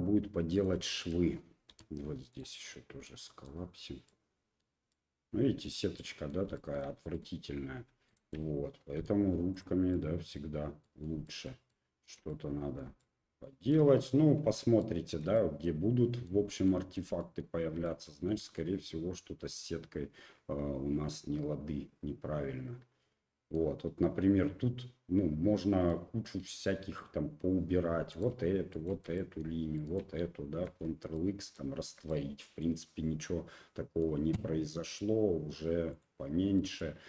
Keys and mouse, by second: 0.5 right click, 0.9 shift+right click, 1.7 m, 3.0 middle click, 4.0 middle click, 4.9 middle click, 5.9 middle click, 6.5 shift+click, 7.1 right click, 8.1 shift+click, 9.0 m, 9.9 click, 10.8 middle click, 11.2 shift+middle click, 11.7 shift+middle click, 12.3 middle click, 13.0 shift+middle click, 13.7 middle click, 14.8 shift+middle click, 15.3 middle click, 16.6 shift+middle click, 17.2 middle click, 17.8 shift+middle click, 18.5-23.5 middle drag, 25.9-27.0 middle drag, 27.9 2, 28.1 click, 28.8 shift+click, 29.1 click, 29.7 shift+click, 30.6 ctrl+x, 31.1 click, 31.8 Tab, 32.1 click, 34.9 click, 35.9 click, 36.6 middle click.